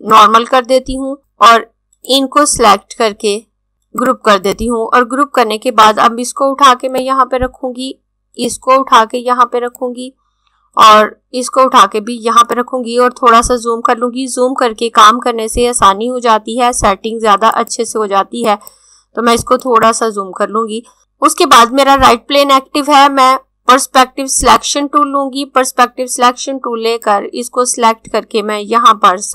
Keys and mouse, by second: 3.7 right click, 4.0 click, 17.2 click, 24.4 click, 27.0 click.